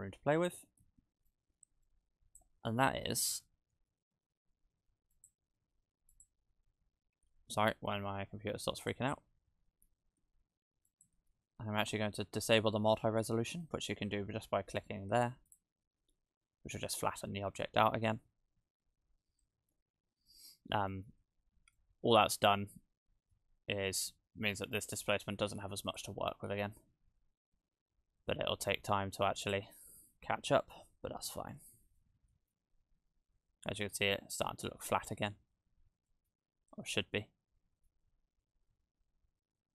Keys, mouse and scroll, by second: 0.7-1.3 scroll up 5, 1.3 click, 7.6 shift+d, 7.7 click, 7.7-8.1 scroll down 4, 8.8 click, 9.3 shift+d, 15.5 click, 19.0-20.3 scroll down 2, 20.3-20.6 scroll up 1, 20.9 middle click, 21.2-22.9 scroll down 3, 21.8 middle click, 25.9 click, 29.4 click, 30.7 KP_0, 32.0 shift+middle click, 33.1-34.5 scroll up 1, 35.8-37.0 scroll down 6, 36.1 middle click, 36.9 middle click, 37.9-38.4 scroll down 2.